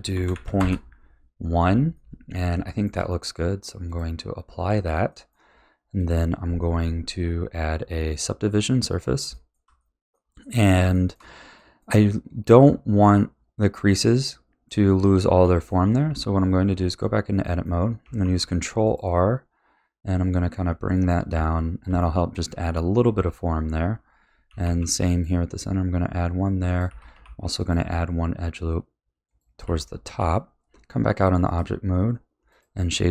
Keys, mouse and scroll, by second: 1.9-3.9 middle drag, 3.9 click, 4.6-5.1 scroll down 3, 5.1 middle click, 5.9-9.3 drag, 9.3-12.4 shift+middle drag, 12.4-13.9 scroll up 3, 13.9-16.1 middle drag, 16.1 Tab, 17.4-18.2 middle drag, 18.2 ctrl+r, 21.3 a, 22.0-23.7 shift+middle drag, 23.7-24.6 scroll up 2, 24.6 ctrl+r, 26.9 a, 27.2 ctrl+r, 29.6 a, 30.1 Tab, 30.9-31.4 scroll down 5, 31.4-33.1 right drag.